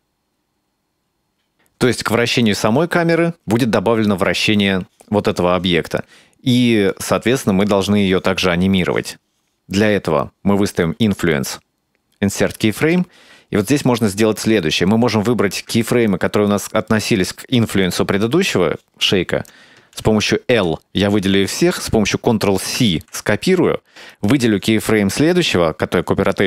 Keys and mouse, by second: 6.9 click, 11.1-12.6 right drag, 15.2 right click, 15.8-17.0 ctrl+middle drag, 20.5 l, 22.8 ctrl+c, 24.1 right click.